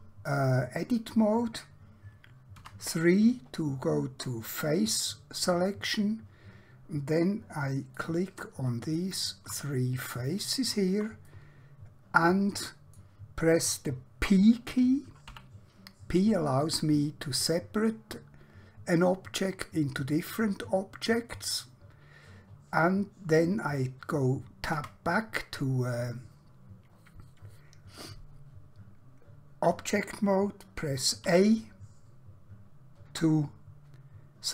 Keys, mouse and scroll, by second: 2.5 3, 4.7 middle click, 7.9 click, 8.9 shift+click, 9.7 middle click, 10.5 shift+click, 11.3 middle click, 15.4 p, 21.3 click, 24.8 Tab, 31.3 a.